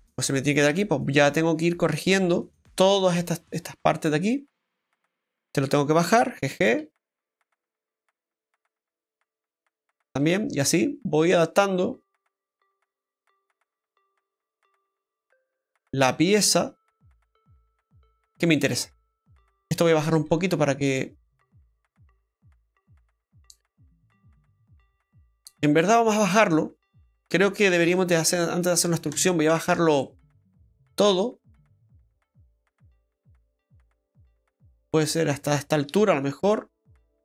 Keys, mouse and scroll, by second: 1.6 middle click, 3.4 middle click, 3.4 scroll up 1, 4.1 middle click, 4.1-4.6 scroll up 1, 5.4 right click, 6.9 g, 9.8 right click, 12.9 right click, 13.1 g, 15.9 right click, 16.1 g, 19.1 middle click, 19.7 right click, 20.0 g, 22.3 click, 23.8 right click, 25.0 click, 26.9 middle click, 27.9 ctrl+z, 29.2 ctrl+shift+right click, 30.0 middle click, 31.4 click, 35.6 middle click, 36.5 middle click, 36.5 scroll down 1.